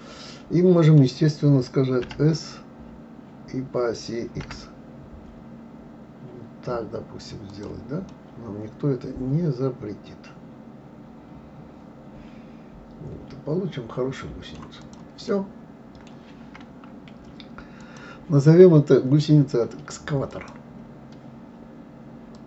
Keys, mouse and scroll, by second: 2.0 s, 8.1-11.2 middle drag, 14.8 click, 15.3-16.5 middle drag, 16.5 scroll up 1, 17.8 click.